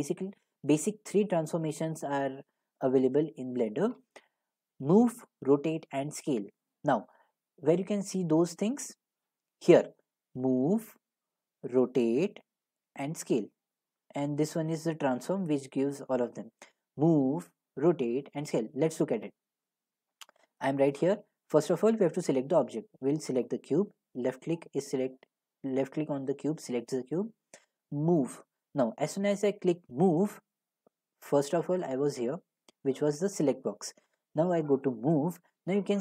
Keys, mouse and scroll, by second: 20.5 middle click, 21.1 click, 23.5 click, 28.2 click, 31.9 click, 34.9 click.